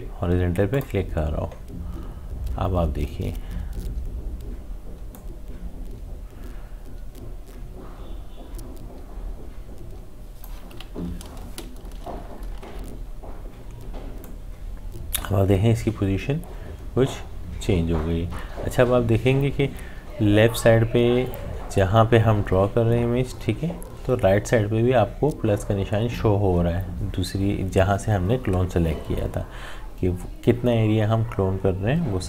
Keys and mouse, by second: 5.2-12.6 drag, 12.6 ctrl+z, 14.2-24.2 drag.